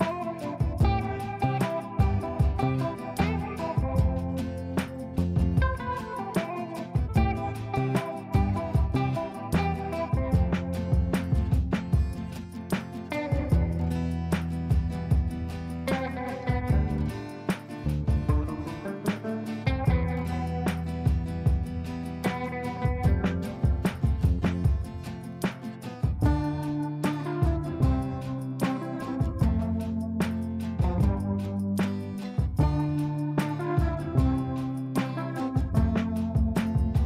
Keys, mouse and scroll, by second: 0.0 ctrl+k, 0.9 click, 1.2 F2, 1.7-4.2 drag, 7.5 ctrl+space, 8.9 click, 12.0-15.9 drag, 18.1 l, 18.8 click, 21.0-22.6 ctrl+right drag, 22.6 ctrl+z, 23.6 click, 24.4 ctrl+right click, 25.8 click, 26.4 ctrl+a, 27.7 shift+s, 29.1-30.9 typing, 31.5 shift+Return, 32.4 shift+a, 32.7 shift+b, 34.1 shift+d, 34.9 shift+m, 35.2 shift+i.